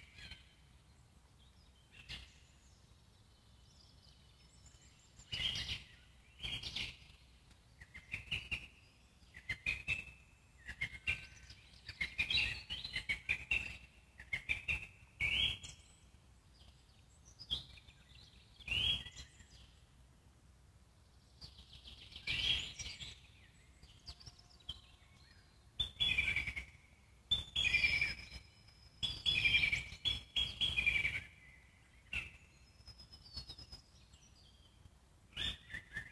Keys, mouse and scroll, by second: 2.5-3.0 drag, 3.0 scroll up 1, 3.2 middle drag, 3.5 Tab, 4.0-5.9 alt+middle drag, 5.9 click, 6.2 middle click, 6.9 Tab, 7.8-9.6 alt+middle drag, 9.6-10.0 scroll up 3, 10.0 Tab, 12.0-14.1 alt+middle drag, 14.1 click, 16.0 click, 16.5-17.5 scroll down 1, 17.5-20.5 alt+middle drag, 21.1-22.2 scroll up 3, 22.2 ctrl+click, 22.5 scroll down 4, 22.7-24.2 alt+middle drag, 24.2-24.6 scroll up 1, 24.6-25.7 alt+middle drag, 25.7 ctrl+click, 26.4 ctrl+click, 26.6-27.3 scroll down 4, 26.8 middle click, 27.3 alt+middle click, 27.9-28.5 scroll up 2, 28.5 ctrl+click, 28.8-29.2 scroll down 1, 29.2 alt+middle click, 29.4 scroll down 1, 29.5 alt+middle click, 30.2-30.7 scroll up 1, 30.7 ctrl+click, 31.2 ctrl+click, 31.4 middle click, 32.3 ctrl+click, 32.6 middle click, 33.5 ctrl+click, 33.8-35.0 middle drag, 35.0 ctrl+Left, 35.3-36.1 middle drag.